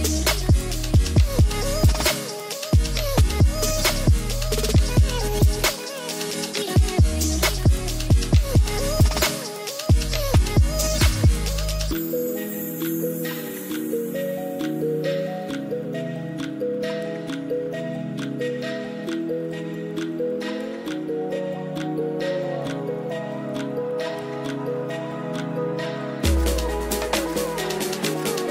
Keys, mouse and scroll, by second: 2.6 click, 4.3-6.5 drag, 8.0-9.6 drag, 11.7 drag, 12.5 ctrl+s, 12.8 middle click, 13.5 middle click, 14.4-18.8 drag, 21.7-24.0 drag, 25.5 click, 26.1-26.6 drag, 27.9-28.5 drag.